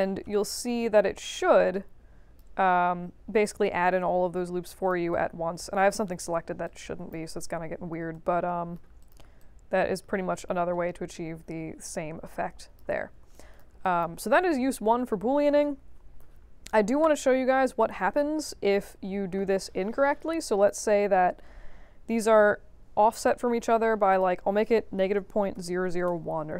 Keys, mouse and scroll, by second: 0.4 ctrl+z, 1.3-2.3 drag, 3.4-4.8 drag, 5.1 alt+click, 6.6 alt+click, 7.5 3, 8.1 right click, 9.0 click, 9.3-12.7 alt+drag, 13.0 middle click, 13.3 alt+click, 13.8 click, 14.3 scroll up 2, 16.2 middle click, 17.7 click, 18.8 shift+h, 20.6 click, 22.2-23.2 drag, 24.1 click, 24.7-26.0 typing, 26.0 Return.